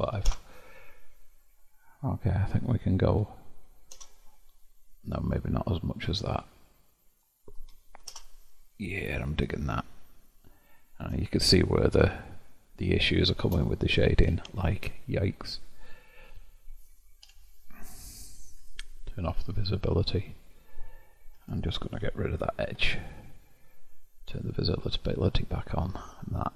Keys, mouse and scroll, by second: 6.4-9.4 drag, 9.8-13.9 shift+middle drag, 13.9-14.5 scroll up 4, 14.5-17.4 shift+middle drag, 17.4 Tab, 18.6 click, 19.4-21.4 middle drag, 21.4 2, 21.6 click, 22.8 ctrl+x, 24.4-26.5 drag.